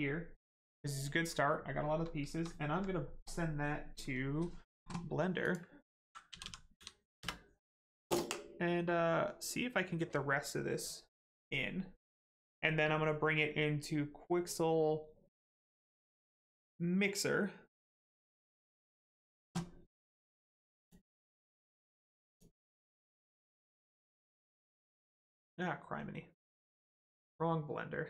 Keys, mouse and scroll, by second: 2.6 alt+right click, 3.3 click, 3.3 click, 6.3 l, 6.4 e, 6.7 n, 20.8 click.